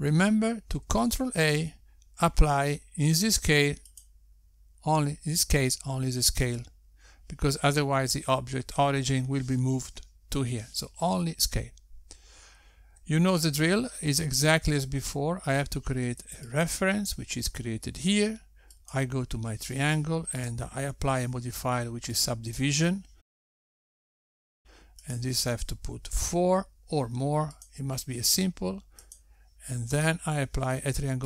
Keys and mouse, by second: 3.6 ctrl+a, 15.8 shift+a, 21.7 click, 23.3 click, 26.3 click, 29.1 click, 30.6 click.